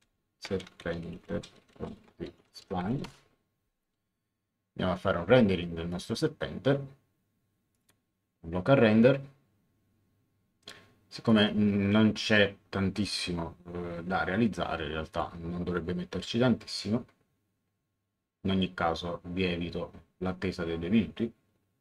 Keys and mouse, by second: 0.3-3.4 typing, 5.9 click, 7.7 click, 11.3 click, 15.1 click.